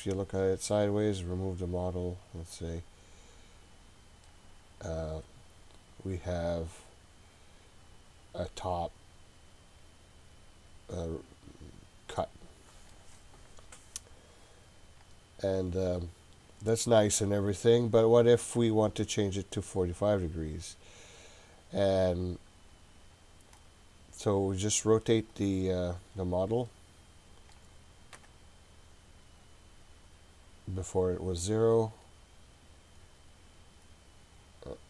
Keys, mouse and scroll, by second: 2.8 click, 4.3-13.0 middle drag, 15.0 click, 16.5 click, 16.9 click, 17.5 click, 18.8 click, 23.6-25.4 drag, 25.8-26.2 scroll down 1, 26.2-26.7 scroll up 2, 26.7-27.6 middle drag, 28.1 KP_7, 31.4 click, 33.0 click, 33.9 click.